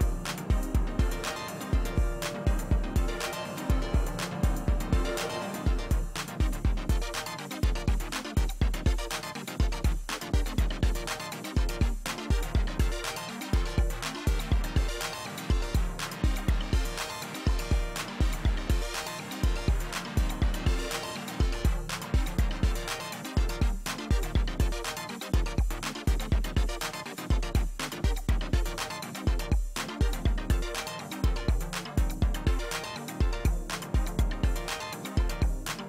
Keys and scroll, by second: 2.3 space, 4.2 space, 19.4 alt+shift+BackSpace, 20.2 space, 22.6 ctrl+space.